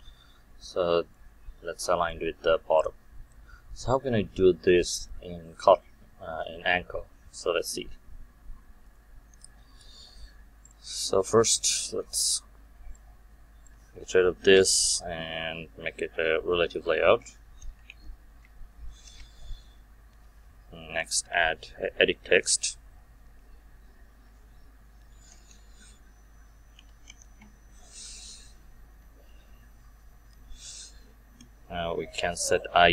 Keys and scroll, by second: 14.5 Delete, 15.7 ctrl+w, 19.0 Return, 27.2 Return.